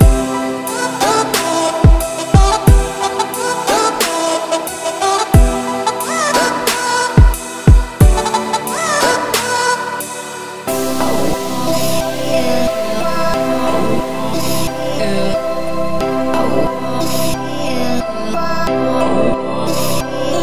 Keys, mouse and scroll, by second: 0.8-4.4 drag, 6.0 click, 9.7-10.3 middle drag, 10.3 click, 10.6-11.0 scroll down 2, 11.0 shift+middle drag, 11.2-11.5 scroll up 3, 11.6 click, 12.8-14.7 drag, 15.0-15.5 scroll down 5, 15.5 scroll up 3, 15.8 z, 19.1 click.